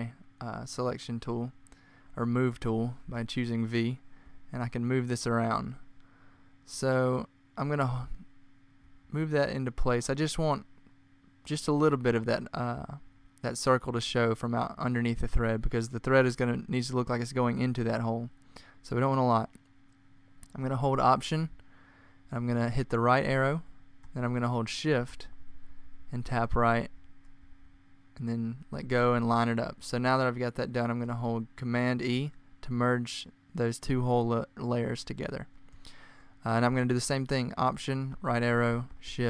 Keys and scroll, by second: 4.1 Left, 8.7 Right, 8.9 Left, 18.0 Right, 24.8 Right, 25.0 Right, 25.1 Right, 25.3 Right, 25.5 Right, 25.8 Right, 26.1 Right, 26.6 Right, 31.8 e, 38.0 Right, 38.6 Right, 38.7 Right, 38.9 Right.